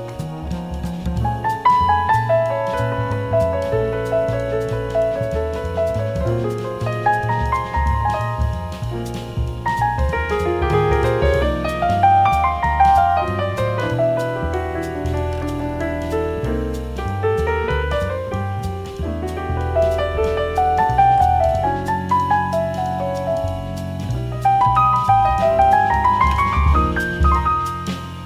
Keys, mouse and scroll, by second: 2.0-3.8 right drag, 4.0-6.0 middle drag, 6.0-18.2 drag, 18.2-20.2 middle drag, 19.3 a, 23.2 b, 27.8 b.